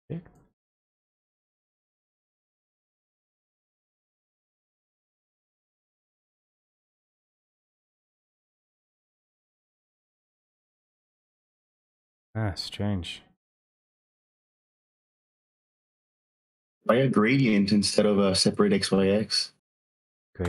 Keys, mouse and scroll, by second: 0.4 click, 2.7 click, 6.4 ctrl+z, 6.4 click, 7.1 click, 12.3 click, 12.5 ctrl+z, 13.7 click, 18.2 click, 18.7 alt+space, 19.3 typing, 20.3 Return.